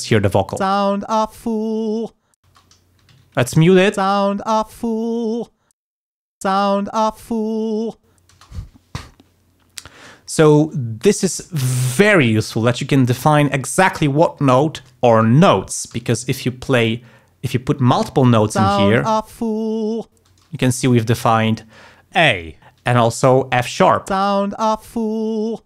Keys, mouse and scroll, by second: 0.7 space, 2.4 space, 3.1 alt+1, 4.0 space, 5.8 space, 6.2 alt+1, 6.5 alt+space, 8.3 space, 15.9 d, 16.5 click, 18.6 space, 20.3 space, 24.2 space.